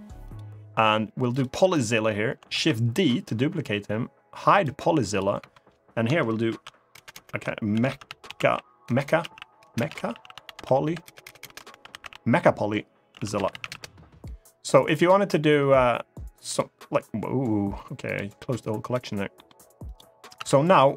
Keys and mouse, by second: 2.3 shift+d, 2.7 right click, 4.2 click, 4.8 click, 5.1 F2, 6.8 BackSpace, 8.8 BackSpace, 11.0 BackSpace, 13.2 l, 16.2 click, 17.8 click, 18.5 click, 19.1 middle click, 19.6 click, 20.1 Tab, 20.8 middle click.